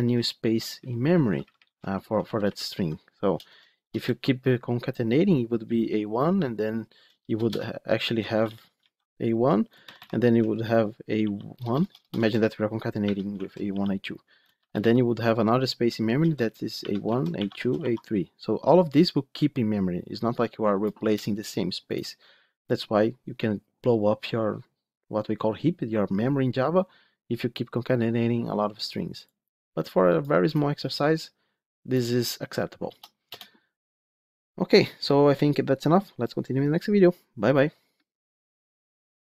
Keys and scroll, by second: 2.1 ctrl+shift+Left, 7.3 shift+Return, 8.3 ctrl+z.